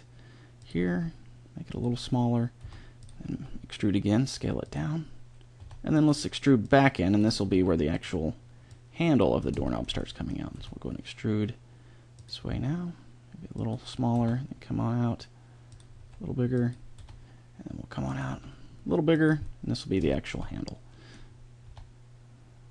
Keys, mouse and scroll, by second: 0.9 s, 2.0 middle click, 2.6 e, 3.3 s, 5.5 e, 6.6-8.5 drag, 7.5 s, 8.7 click, 9.6 middle click, 10.5 e, 11.3 click, 12.5 s, 14.1 e, 15.9 s, 17.0 e, 18.2 s, 21.6 e.